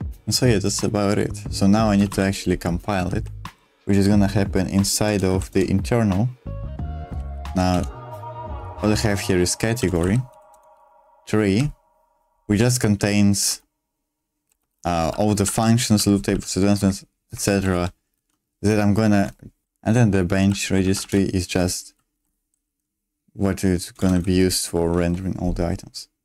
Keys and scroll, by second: 1.8-3.9 typing, 3.9 Return, 5.1 Return, 5.5 Return, 5.5 k, 7.1 j, 7.2 j, 7.3 j, 7.5 j, 7.7 Return, 9.7-17.7 typing, 17.3 Escape, 19.6-22.3 typing, 22.1 Escape, 23.8-25.0 typing.